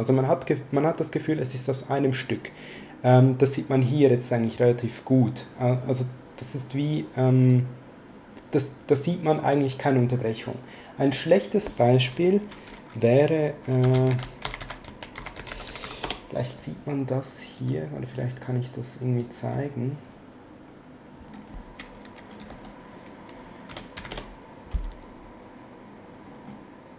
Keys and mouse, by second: 11.1 click, 13.6-16.3 typing, 17.6 click, 22.3 click, 22.5-24.5 typing.